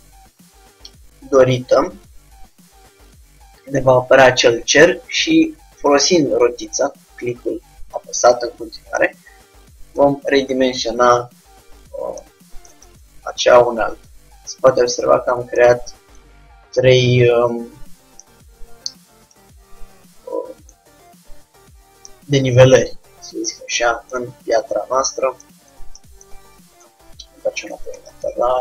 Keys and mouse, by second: 13.0 Tab, 27.0 KP_3.